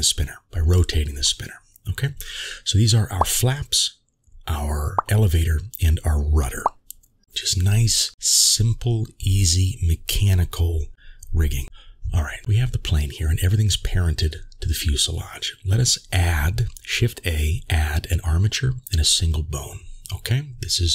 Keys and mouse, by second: 2.2 click, 2.9 Tab, 4.5-5.3 middle drag, 6.7 click, 8.0 click, 11.9-12.4 middle drag, 12.4 g, 12.5 g, 17.4 shift+a.